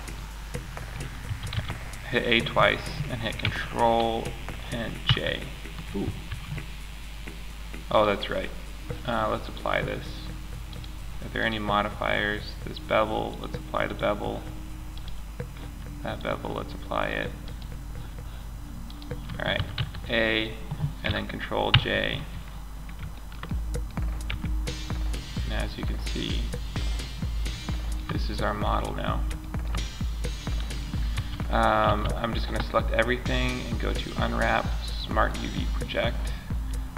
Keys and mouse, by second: 0.0-2.0 middle drag, 0.6 a, 0.9 a, 4.4 ctrl+j, 5.7 ctrl+z, 10.8-11.5 drag, 11.9-12.6 drag, 14.3 right click, 15.5 right click, 18.9 a, 19.1 a, 21.0 ctrl+j, 23.7 Tab, 30.5 a, 31.2 a.